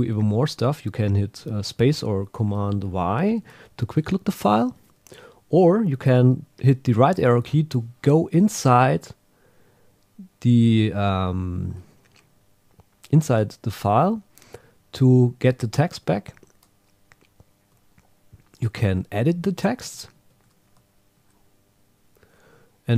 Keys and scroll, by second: 3.9 ↘, 6.8 Right, 11.3 Down, 15.9 Down, 16.2 Up, 19.2 Left, 20.1 shift+super+Right, 20.9 Return, 21.3 Tab.